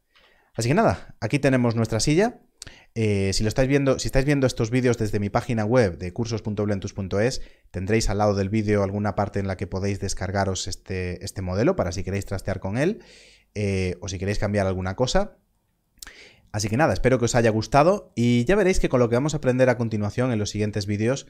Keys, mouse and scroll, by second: 0.0 alt+a.